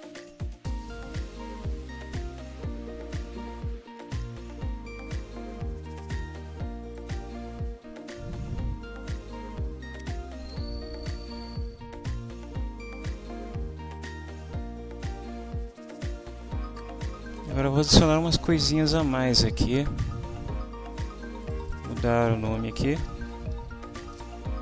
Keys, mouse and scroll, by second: 4.5-7.1 drag, 7.7-11.3 ctrl+middle drag, 9.7 ctrl+s, 21.4 click, 22.8-24.1 typing, 24.1 Return.